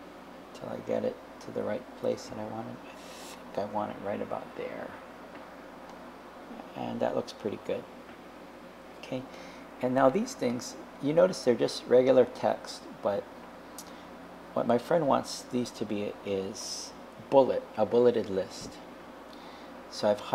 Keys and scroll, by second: 1.6 Right, 3.3 Up, 4.4 Up.